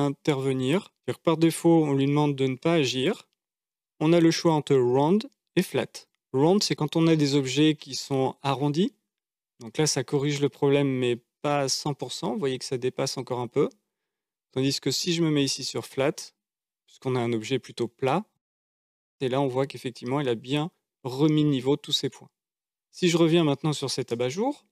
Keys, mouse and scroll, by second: 0.0-9.1 drag, 11.0-13.8 middle drag, 15.1-16.4 right drag, 19.2-22.9 middle drag, 23.2 Tab, 24.4-24.7 shift+middle drag.